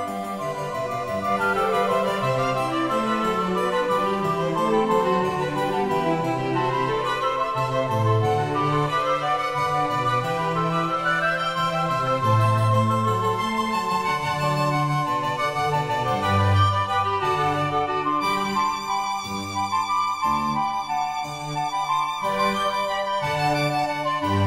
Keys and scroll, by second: 12.1 1.